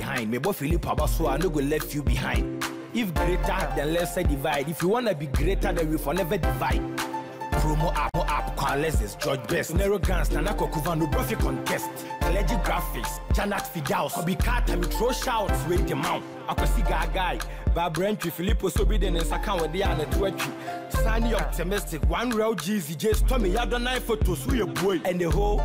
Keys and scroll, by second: 15.0 ctrl+t.